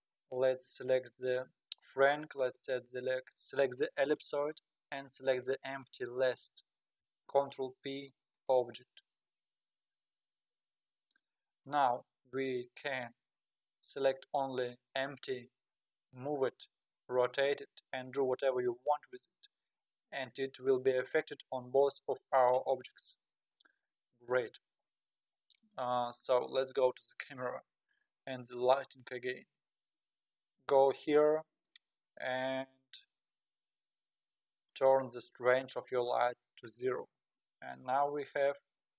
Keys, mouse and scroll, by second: 0.2-0.7 scroll up 2, 0.7-1.1 scroll down 4, 1.2 click, 1.7 scroll down 1, 2.5 shift+click, 5.8 shift+click, 7.3 ctrl+p, 11.7 click, 12.5 click, 15.7 g, 17.1 r, 18.6 s, 22.9-24.0 scroll up 7, 24.0-24.4 scroll up 1, 28.8 click, 34.7-37.9 drag, 37.9 z.